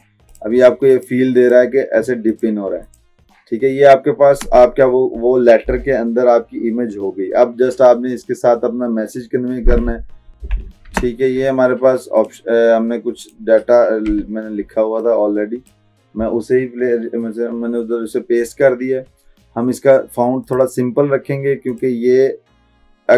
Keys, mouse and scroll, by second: 10.3 click, 10.9 ctrl+a, 12.3 click, 13.3 click, 14.2 t, 15.1-16.1 drag, 20.5 click.